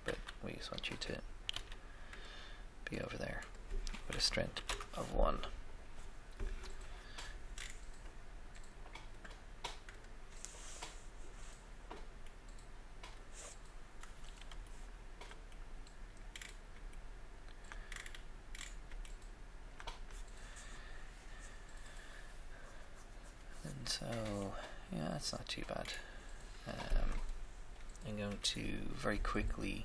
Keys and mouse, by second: 0.0 r, 1.5 g, 2.9 click, 4.5 1, 4.6 Return, 7.5-9.1 middle drag, 9.1 click, 10.1-11.4 drag, 12.3 middle click, 15.5 shift+middle click, 16.7 middle click, 19.1 shift+middle click, 19.3 middle click, 24.5 middle click, 25.0 middle click, 26.8 right click, 28.3 KP_Decimal.